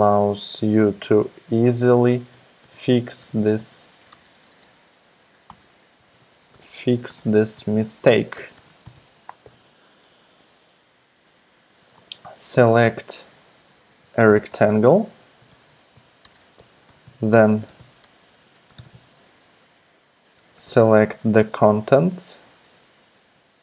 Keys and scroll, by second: 0.0-10.2 typing, 4.2 alt+BackSpace, 4.6 alt+BackSpace, 5.5 Return, 11.8-22.8 typing.